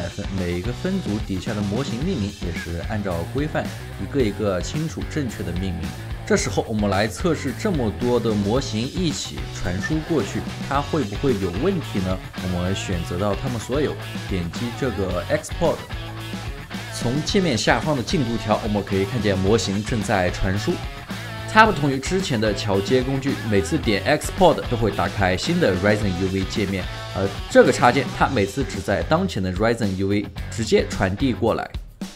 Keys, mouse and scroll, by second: 6.6 alt+middle click, 8.7 double click, 13.5 alt+middle click, 20.3 alt+right click, 21.0 alt+middle click.